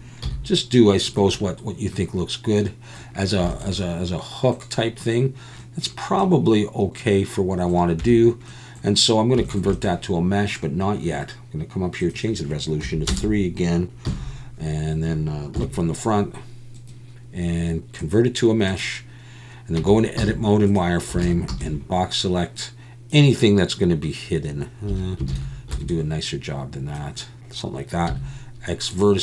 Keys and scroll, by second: 0.2 z, 8.0 Tab, 14.1 KP_1, 15.6 KP_1, 19.8 Tab, 20.2 z, 21.2 alt+a, 21.5 b, 24.9 1, 25.3 alt+a, 25.7 b, 28.1 x.